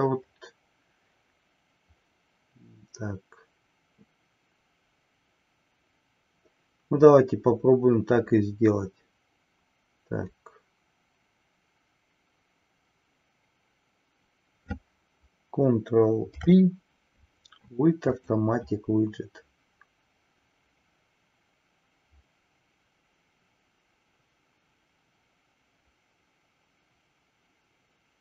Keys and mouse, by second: 16.1 ctrl+p.